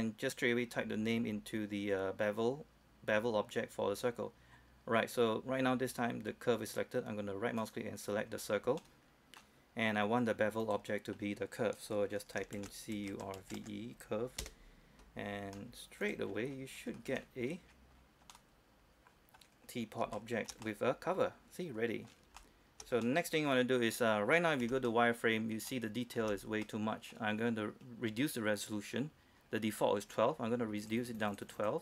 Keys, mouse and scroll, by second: 7.8 right click, 8.1-9.0 scroll up 1, 9.0-10.2 middle drag, 10.8 click, 12.8-13.6 typing, 14.6 Return, 15.5-16.2 scroll down 1, 16.2 click, 16.5 scroll down 1, 17.1 scroll up 1, 17.2-17.5 scroll down 1, 18.5 middle click, 19.8-20.3 scroll up 1, 20.4-22.3 shift+middle drag, 22.6-24.8 shift+middle drag, 24.8 z, 25.1 middle click, 25.7 scroll up 1, 25.9 middle click, 31.0 click.